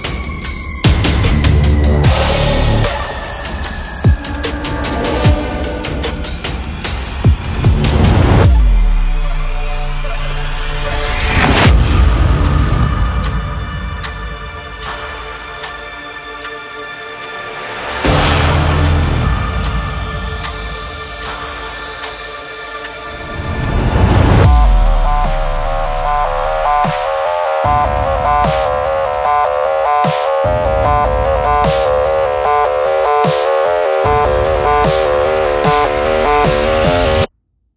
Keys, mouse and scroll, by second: 0.3-7.0 drag, 7.0 Up, 8.2 click, 8.4 click, 13.2 click, 16.0 scroll up 1, 16.5 scroll down 1, 17.9 click, 20.0 Right, 20.6-21.3 scroll up 1, 21.5 scroll down 1, 22.2 space, 22.4 click, 22.6 space, 22.9 scroll down 1, 23.1 space, 23.2 click, 23.4 space, 24.2 scroll up 1, 24.7 scroll up 1, 24.8 space, 25.0 click, 25.1 space, 25.4 scroll down 1, 26.6 scroll up 1, 27.0 scroll down 1, 27.0 scroll up 1, 29.0 click, 30.0 scroll up 1, 30.4 space, 30.6 click, 30.8 space, 31.6-35.5 drag, 35.9 click, 37.3 scroll down 1.